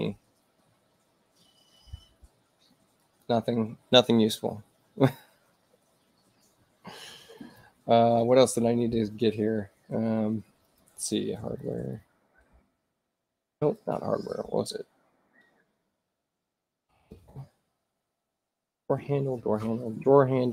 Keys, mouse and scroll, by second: 3.0 click, 7.4 click, 9.3-10.6 middle drag, 9.3-10.6 scroll up 2, 10.6 click, 11.3-12.5 typing, 13.8 click, 16.4-17.8 typing.